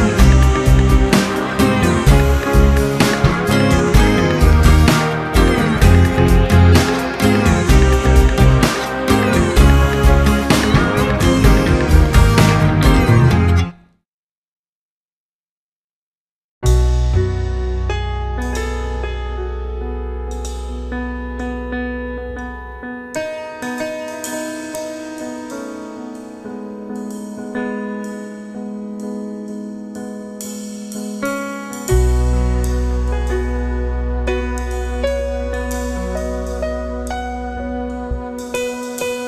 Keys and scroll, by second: 0.4 space, 1.2 space, 3.0 space, 4.0 ctrl+KP_Subtract, 5.0 ctrl+y, 5.4 ctrl+space, 6.0 Return, 10.7 a, 14.0 alt+i, 14.6 alt+a, 15.3 alt+s, 18.6 Return, 19.1 space, 20.8 alt+i, 21.2 alt+a, 22.0 alt+c, 23.8 Return, 24.2 ctrl+space, 26.6 alt+i, 27.1-28.0 typing, 30.0 ctrl+b, 31.7 Return, 32.5 w, 32.7 Return, 33.9 alt+space, 34.2 c, 34.6 Return, 35.4 ctrl+KP_Add, 36.4 alt+i, 36.6 alt+a, 37.4 shift+F2, 38.0 ctrl+space, 38.6 space.